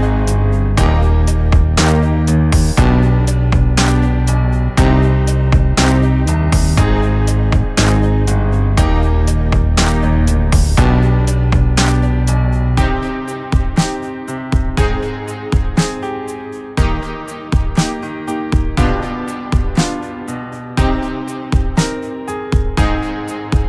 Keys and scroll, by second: 1.1 ctrl+=, 1.4 ctrl+=, 2.4-3.6 typing, 6.6 ctrl+=, 6.8 v, 7.7 ctrl+-.